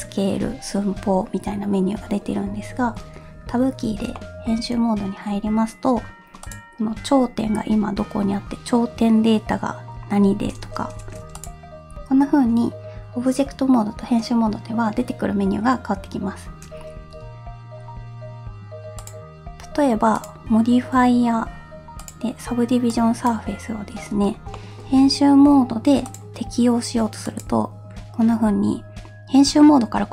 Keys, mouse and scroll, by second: 4.1 middle click, 4.6 Tab, 6.4 click, 11.1 2, 11.4 click, 17.1 Tab, 19.0 click, 20.1-22.1 drag, 24.6 middle click, 24.9 Tab, 24.9 scroll up 1, 26.1-30.1 drag.